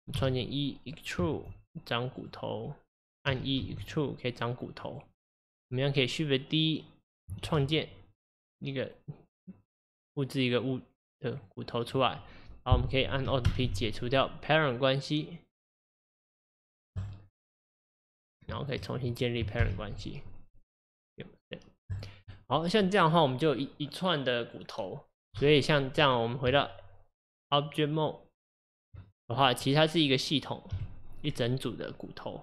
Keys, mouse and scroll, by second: 0.2 e, 3.3 e, 6.1 click, 7.4 shift+d, 18.7 shift+click, 22.0 ctrl+p, 22.4 click, 29.0 Tab, 29.3 scroll down 3, 29.6-30.7 middle drag, 30.7 g.